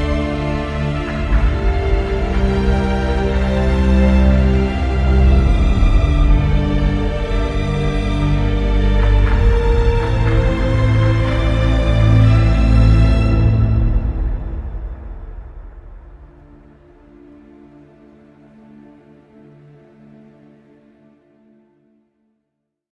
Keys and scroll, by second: 9.0 ctrl+t, 12.6 t, 14.9 Return, 15.1 Delete.